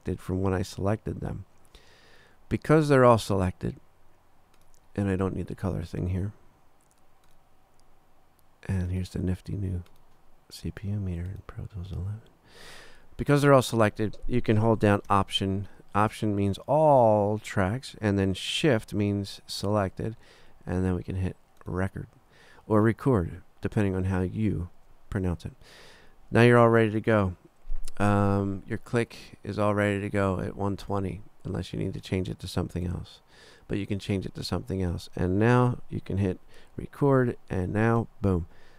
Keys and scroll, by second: 38.0 3.